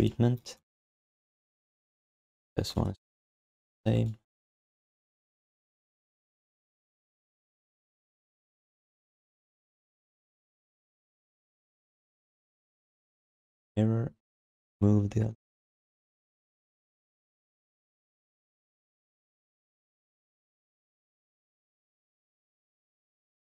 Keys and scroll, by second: 2.3 alt+q, 6.1 ctrl+shift+d, 13.3 ctrl+d, 16.7 Tab, 17.0 Tab, 17.2 Tab, 17.3 Tab, 17.5 Tab, 17.6 Tab, 17.8 Tab, 18.0 Tab, 20.9 alt+q.